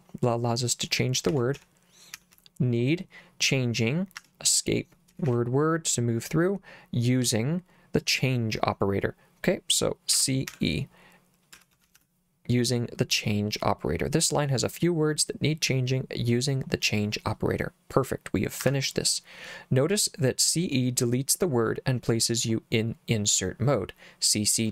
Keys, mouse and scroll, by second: 1.1-2.9 typing, 5.1 w, 5.3 w, 7.3 l, 10.2-12.5 typing, 18.7 Escape.